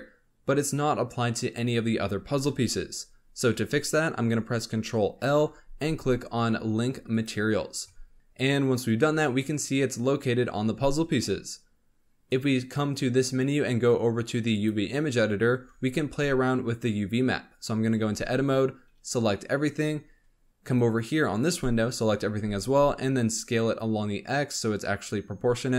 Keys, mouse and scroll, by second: 5.1 ctrl+l, 12.2-15.3 drag, 15.6 Tab, 17.9 a, 18.8 scroll down 4, 19.8-20.4 scroll down 2, 21.5 scroll up 2, 21.8 a, 22.3 s.